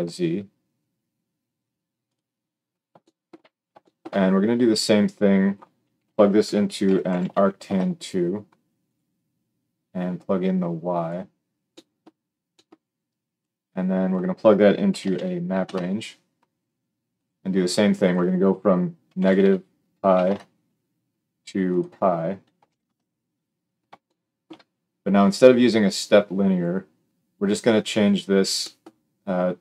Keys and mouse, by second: 2.1-5.0 middle drag, 5.0-8.9 drag, 8.9-10.1 middle drag, 10.1-17.2 drag, 17.2 middle click, 17.9-29.6 drag.